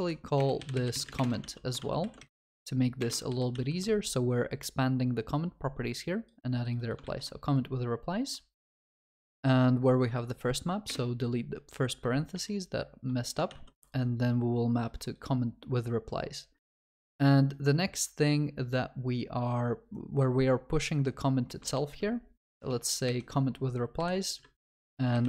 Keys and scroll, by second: 1.5 ctrl+s, 1.8 ctrl+w, 2.0 ctrl+c, 3.5 ctrl+v, 7.0 ctrl+c, 12.4 ctrl+v, 14.9 ctrl+s, 21.8 ctrl+v.